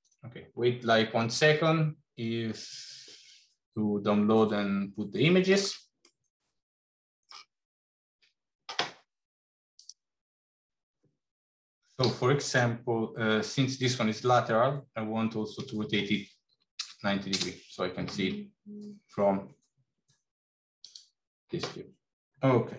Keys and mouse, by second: 3.5-5.3 middle drag, 5.8-7.1 middle drag, 11.9 r.